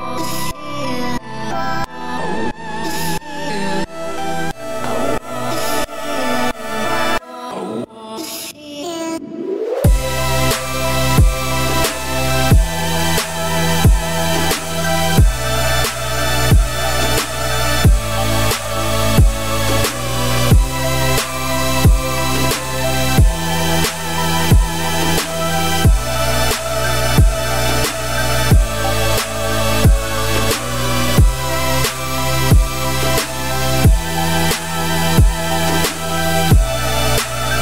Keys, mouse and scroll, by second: 1.2 middle click, 1.6 scroll up 2, 1.8 a, 2.3-2.7 scroll down 1, 2.7 e, 6.9 middle click, 7.4 a, 7.9-9.3 middle drag, 9.3 alt+e, 12.0 ctrl+z, 12.4 middle click, 12.8 a, 13.6 shift+n, 14.1 middle click, 14.9-15.4 scroll up 2, 15.4-18.5 middle drag, 21.0 middle click, 21.6 alt+e, 28.9 scroll down 2, 29.1 shift+middle click, 29.5-30.2 scroll up 3, 30.2 click, 30.7 alt+click, 31.4 ctrl+x, 31.8-33.2 middle drag, 33.2-33.7 scroll down 4, 33.7 middle click, 34.3 click, 34.7 alt+click, 35.1-36.5 middle drag, 36.5 ctrl+x, 36.9-37.4 scroll down 4, 37.4 shift+middle click.